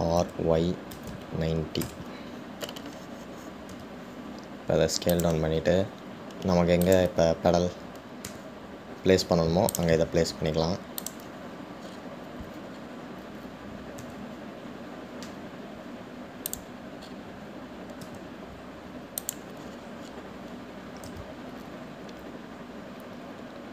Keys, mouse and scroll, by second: 1.1 r, 8.0 click, 12.5 click, 13.1-15.2 scroll up 11, 15.2 g, 18.3-18.8 scroll up 1, 19.0 scroll up 3, 19.2 g, 20.9-22.4 scroll down 5, 22.4 s.